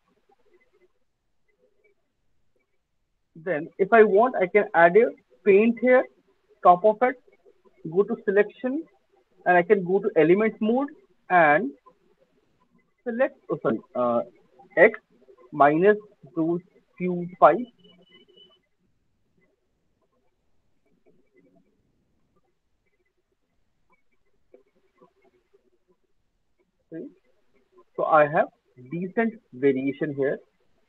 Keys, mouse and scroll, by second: 0.2 click, 0.6 click, 1.0 click, 1.2 alt+click, 1.3 click, 3.5 click, 5.5 click, 5.5 middle click, 7.6 right click, 8.2 click, 9.8 click, 11.5 alt+middle click, 11.9 alt+right click, 12.5 click, 14.0 ctrl+z, 14.7 x, 15.4 click, 16.4 click, 16.8 click, 17.8 click, 18.2 click, 20.3 click, 21.1 click, 21.5 click, 22.7 click, 23.4 click, 24.3 alt+scroll, 24.8 alt+right click, 24.8 alt+middle click, 26.0 click, 27.3 alt+click, 27.5 alt+click, 27.7 alt+middle click, 29.2 alt+middle click, 29.4 alt+click, 29.8 alt+middle click.